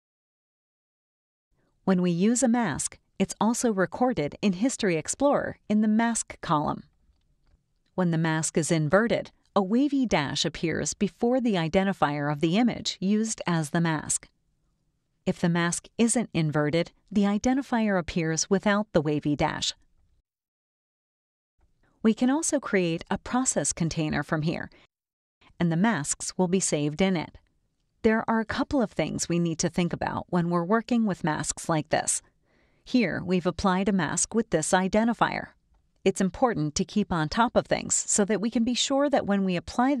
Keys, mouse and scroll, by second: 0.0 click, 1.7 click, 3.7-5.2 drag, 6.4 click, 16.6 click, 21.4-23.5 drag, 23.8 click, 24.4 click, 26.1 click, 27.0-31.5 drag, 34.4 click, 38.2 click, 39.9-40.0 drag.